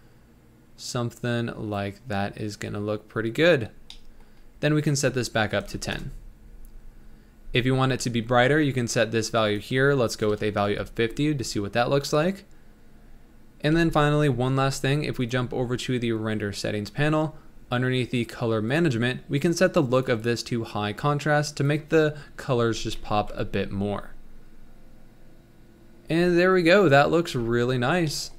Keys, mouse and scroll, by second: 4.4-4.9 scroll up 1, 4.9-8.1 drag, 9.4-12.8 drag, 12.9 scroll up 2, 13.8 ctrl+s, 15.4 click, 17.1 scroll down 1, 17.8-18.5 scroll down 8, 20.7-22.8 drag, 22.8 scroll down 3, 23.3 z.